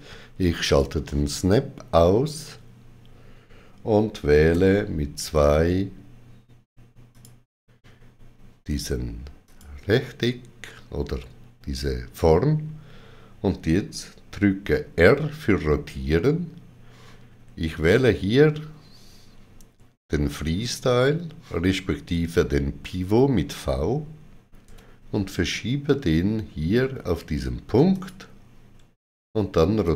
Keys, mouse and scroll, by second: 0.5 click, 4.4 click, 4.4 right click, 4.4 2, 7.0 click, 7.0 2, 9.3 click, 15.0 r, 24.3-25.1 typing, 24.6 click, 27.6-28.3 typing, 27.8 click, 29.7 click.